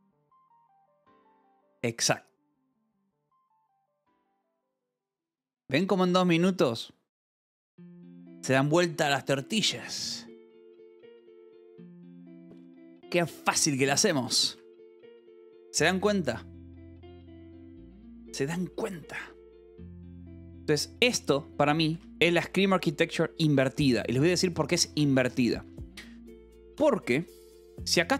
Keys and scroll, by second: 3.5 Escape, 14.9 Escape, 20.7 j, 21.0 k, 22.0 k, 23.4 j, 23.8 k, 25.5 Escape, 27.5 j.